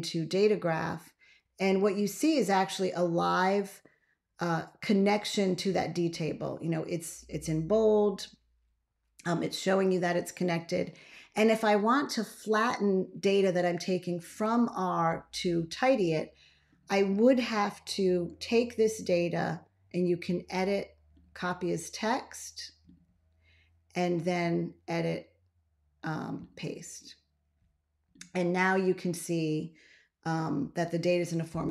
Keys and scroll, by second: 18.2 super+a.